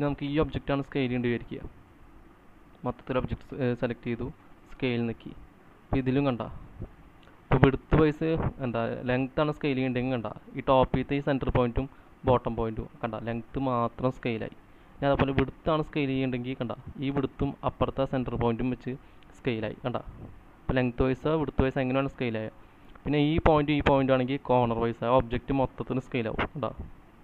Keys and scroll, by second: 4.5 space.